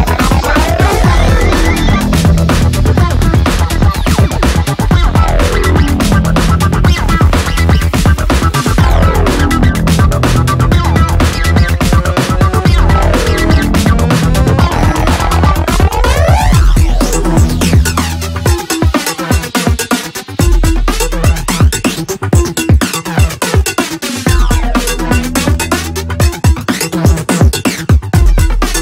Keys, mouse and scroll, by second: 1.1 ctrl+space, 2.3-3.8 typing, 4.4 Return, 5.8 click, 10.7 click, 16.4 space, 19.5 space, 20.3 click, 23.5 space.